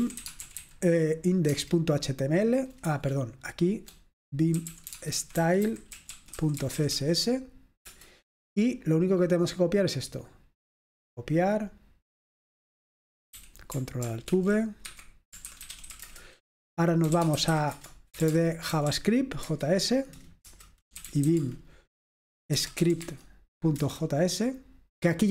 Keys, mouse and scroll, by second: 0.1-1.7 typing, 4.4 BackSpace, 5.5-7.4 typing, 8.8 Return, 8.8 typing, 12.8 click, 13.5 i, 14.9 ctrl+alt+v, 15.1 Escape, 16.4 Return, 16.4-19.6 typing, 17.8 Return, 19.7 Tab, 20.8 Return, 20.9-23.4 typing, 23.9 Return.